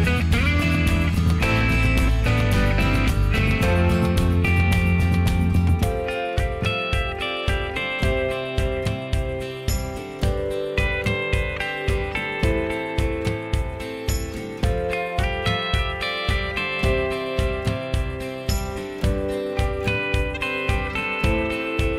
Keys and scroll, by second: 11.8 m.